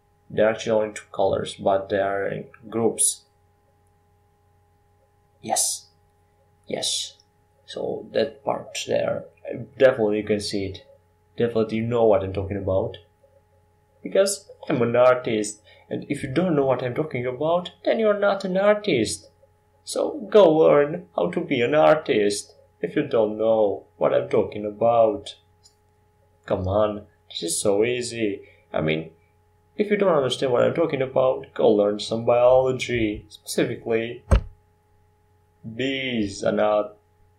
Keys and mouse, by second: 0.6 r, 2.3 s, 4.5 ctrl+z, 5.3 s, 10.0 s, 16.1 r, 19.2 g, 24.6 shift+d, 26.9 r, 29.7 g.